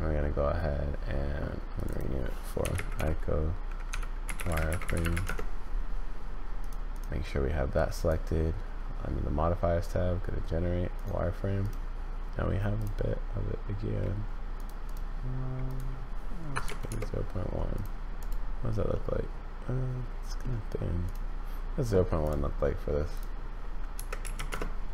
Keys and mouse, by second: 1.9-5.8 drag, 6.6 click, 8.1-11.0 drag, 14.6-17.5 drag, 18.9-20.4 middle drag, 21.0 click, 23.1-24.5 drag.